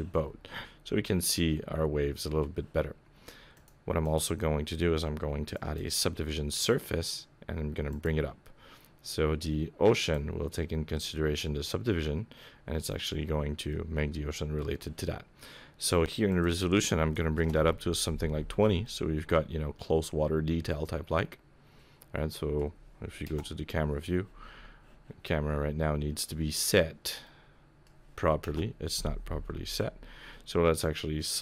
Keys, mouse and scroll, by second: 0.2 scroll up 4, 0.5 middle click, 3.6 click, 4.0 click, 7.9 click, 10.0 click, 13.7 middle click, 16.3 click, 18.8 middle click, 23.2 KP_0, 27.2 middle click, 28.4 KP_0, 31.3 click.